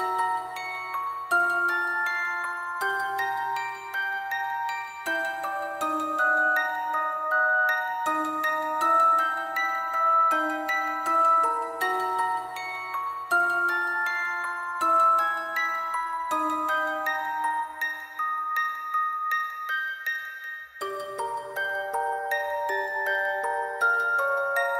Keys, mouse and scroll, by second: 11.1 alt+click, 13.0 alt+click, 17.6 alt+click, 18.5 ctrl+z, 19.0 alt+click, 19.6 alt+click, 20.6 alt+click, 21.1 alt+click, 21.8 alt+click, 22.4 alt+click, 22.8 alt+click, 23.3 alt+click, 23.8 alt+click.